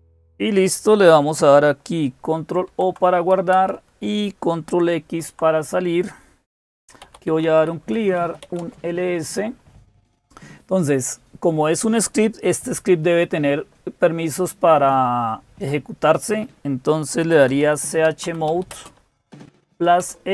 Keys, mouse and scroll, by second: 0.0-20.3 typing, 2.4 ctrl+o, 3.3 Return, 4.9 ctrl+x.